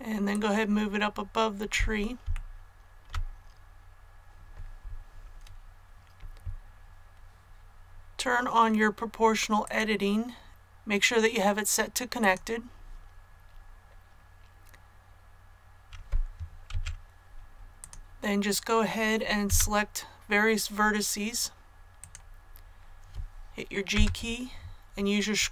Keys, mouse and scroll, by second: 2.3 shift+middle click, 3.5-7.7 scroll up 1, 9.6 click, 15.1-15.6 scroll up 1, 16.7 Tab, 17.7 click, 19.4 a, 21.9 right click, 23.9 g.